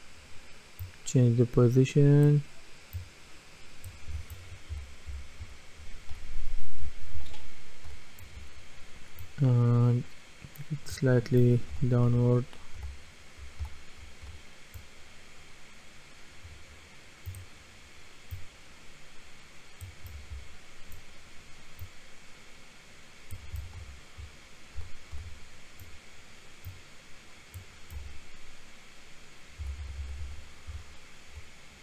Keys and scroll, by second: 4.5-7.9 typing, 11.7-14.2 typing, 20.1 typing, 23.3-25.2 typing, 28.0 typing, 29.4-31.8 typing.